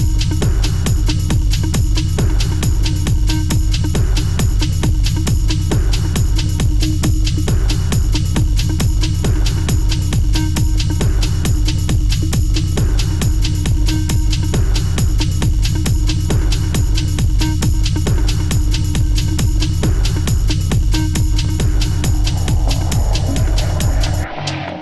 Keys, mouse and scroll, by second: 0.9 e, 2.2 ctrl+z, 2.9 ctrl+z, 3.5 i, 5.5 e, 7.0 middle click, 7.7 click, 10.9 e, 12.0 ctrl+b, 13.4 Tab, 13.7 scroll down 2, 13.9-15.1 middle drag, 15.1 click, 15.7 s, 17.2 s, 18.2 middle click, 18.9 s, 19.7 g, 21.1 scroll down 1, 21.2-22.3 middle drag, 22.3 scroll down 1, 22.6 click, 23.2 click.